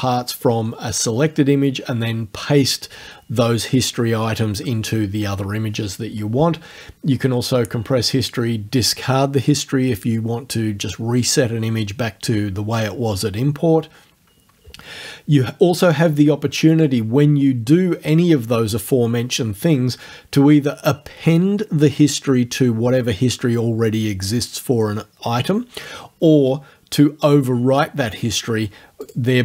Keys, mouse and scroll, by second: 16.8 click, 29.0 click.